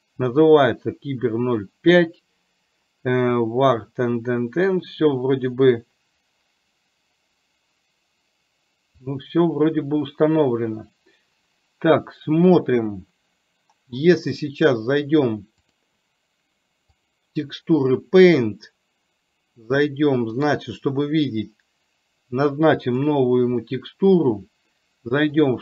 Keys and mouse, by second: 15.7-17.2 drag, 20.5 click, 23.5 click.